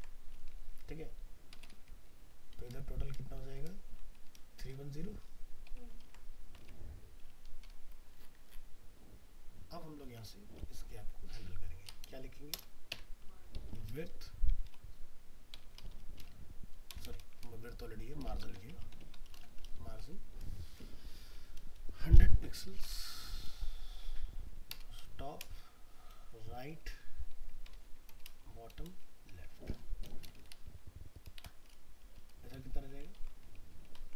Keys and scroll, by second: 6.0 ctrl+s, 6.8 alt+Tab, 10.1 alt+Tab, 27.7 ctrl+Left, 33.2 ctrl+s, 34.0 alt+Tab.